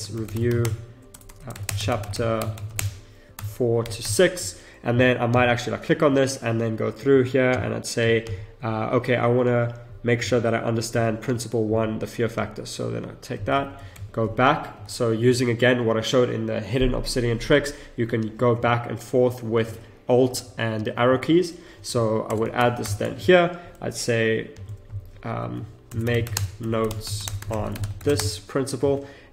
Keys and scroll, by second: 0.6 space, 1.1 BackSpace, 1.6 space, 4.5 space, 13.5 ctrl+c, 14.7 ctrl+alt+Left, 18.6 ctrl+alt+Right, 19.1 ctrl+alt+Left, 19.6 ctrl+alt+Right, 20.3 ctrl+alt+Left, 20.7 ctrl+alt+Right, 21.0 ctrl+alt+Left, 22.8 ctrl+shift+v, 25.8 shift+m, 26.3 space.